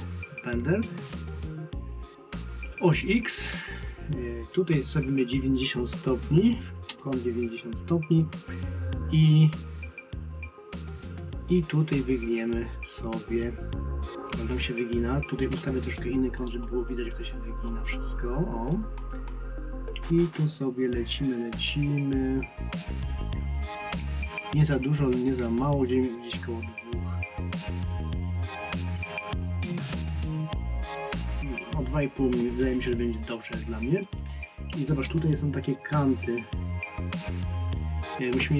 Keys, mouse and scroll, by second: 2.6 click, 12.7 click, 15.6 alt+middle click, 17.7 middle click, 20.2 click.